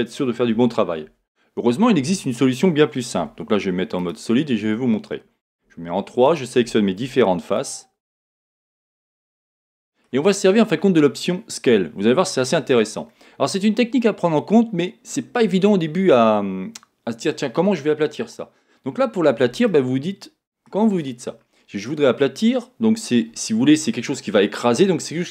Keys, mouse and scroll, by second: 0.5 a, 5.6 3, 5.6 z, 6.2 click, 7.6 click, 8.0 shift+click, 8.5 click, 9.1-9.6 scroll down 1, 9.7-23.7 middle drag.